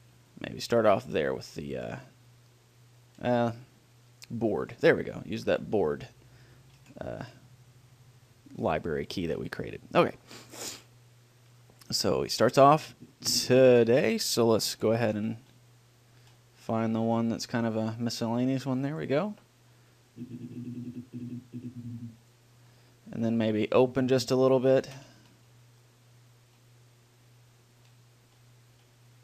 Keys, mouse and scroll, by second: 10.0-11.8 middle drag, 11.8-13.6 drag, 15.3 ctrl+l, 20.4-22.2 drag, 24.1-26.8 drag, 25.2 ctrl+l.